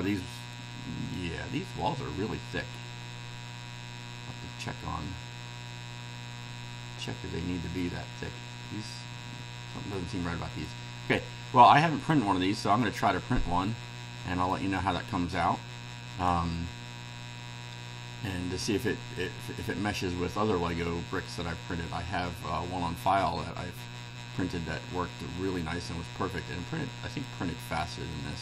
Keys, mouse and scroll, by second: 1.2-10.9 right drag, 10.9-12.2 scroll down 3, 12.2 click, 13.0-13.6 middle drag, 13.7-14.7 right drag, 15.4-16.5 right drag, 23.9 scroll down 2, 25.0-27.4 right drag, 27.9-28.4 drag.